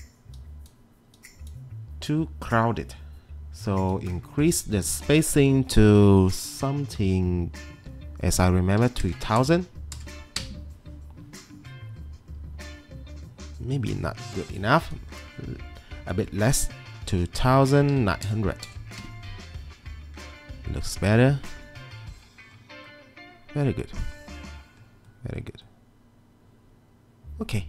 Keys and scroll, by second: 8.6-10.5 typing, 11.8-12.6 typing, 15.2-15.9 typing, 17.4-18.2 typing, 19.0 Return.